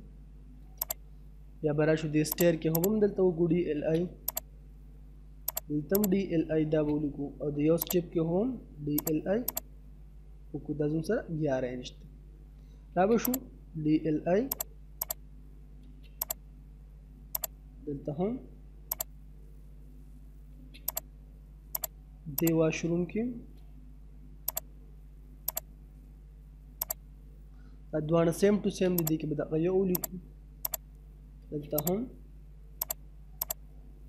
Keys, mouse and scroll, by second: 0.2 space, 0.9 click, 3.2 scroll up 1, 3.4 space, 4.3 click, 6.3 space, 6.5 middle click, 7.9 click, 10.2-10.5 scroll down 1, 10.5 middle click, 10.9 scroll down 1, 11.1 middle click, 12.5 space, 13.3 click, 15.4 space, 16.2 click, 19.4 middle click, 20.2 space, 20.9 click, 23.3 scroll up 1, 24.5 click, 27.2 scroll down 1, 27.9 middle click, 28.2 space, 29.0 click, 31.0 space, 31.8 click, 33.8 middle click.